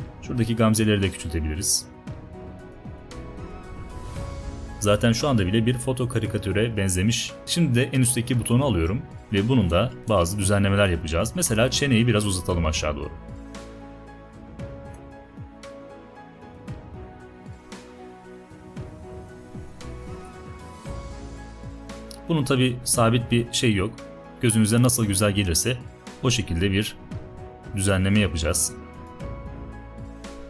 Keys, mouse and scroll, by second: 0.4-1.4 alt+drag, 11.2-12.2 alt+right drag, 22.8-23.8 alt+right drag.